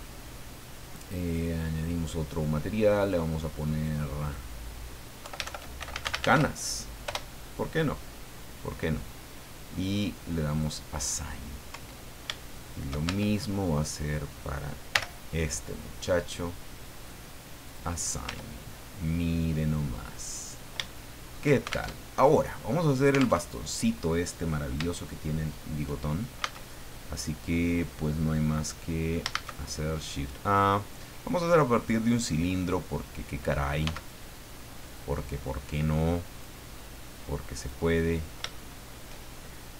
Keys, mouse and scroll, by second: 1.6 click, 3.0 click, 3.6 click, 4.2 click, 5.2 Home, 5.5-6.7 typing, 7.0 Return, 10.5 click, 11.7 Tab, 12.4 shift+middle click, 13.0 Tab, 14.0 right click, 14.3 middle click, 14.9 l, 16.9 click, 17.7 click, 18.2 Tab, 18.6-19.2 scroll down 1, 19.3-21.5 middle drag, 21.9 alt+shift+Tab, 23.4 alt+Tab, 25.0 shift+middle click, 26.4 a, 29.3 shift+a, 32.1 click, 32.8-33.4 scroll down 2, 33.8 s, 34.9 click, 35.4 click, 37.1 click, 38.0-38.3 scroll up 2, 38.5 shift+middle click.